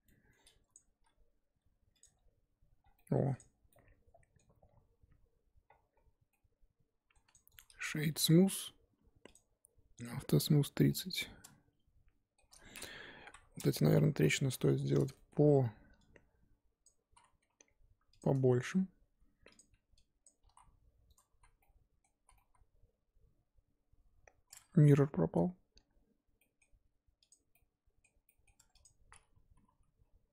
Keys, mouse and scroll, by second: 0.7 click, 0.9 g, 2.0 Tab, 2.8 scroll down 4, 2.9 middle click, 3.3 click, 3.7-5.6 middle drag, 5.6-6.3 scroll up 7, 6.3 middle click, 7.2 click, 7.5-9.9 right drag, 9.9 click, 10.5-10.9 scroll down 4, 10.9-12.4 middle drag, 12.4 scroll up 1, 13.2 KP_1, 13.7 Tab, 14.2 z, 14.3 shift+middle click, 14.6 scroll up 4, 14.8 1, 15.1-16.8 shift+middle drag, 16.8 click, 17.1 z, 17.4 s, 18.6 g, 20.2 click, 20.4 s, 21.4 z, 21.6 middle click, 22.1 z, 22.3-24.6 middle drag, 24.6 Tab, 25.8-26.4 scroll down 1, 26.4-28.5 middle drag, 28.5 Tab, 28.8 click, 29.5 l.